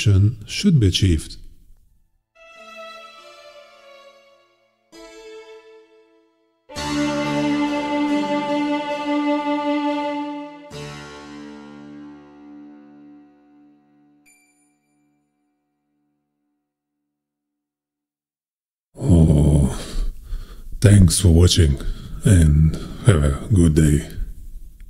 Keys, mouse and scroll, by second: 0.9 click, 2.2 click, 20.2 click.